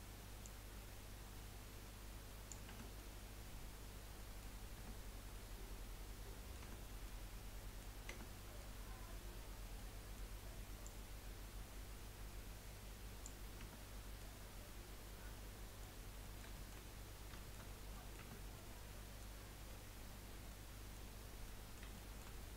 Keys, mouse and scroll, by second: 0.4 click, 2.8 Tab, 3.1-4.4 middle drag, 4.8 Tab, 5.4-6.6 middle drag, 6.6 Tab, 7.1-8.1 middle drag, 8.1 Tab, 8.5-10.8 middle drag, 10.8 click, 13.6 Tab, 13.9-14.4 middle drag, 14.4 scroll down 3, 14.6-16.0 middle drag, 16.0 scroll up 1, 16.2-17.7 middle drag, 17.7 scroll up 2, 17.9-18.2 middle drag, 18.2 Tab, 18.5-22.5 middle drag.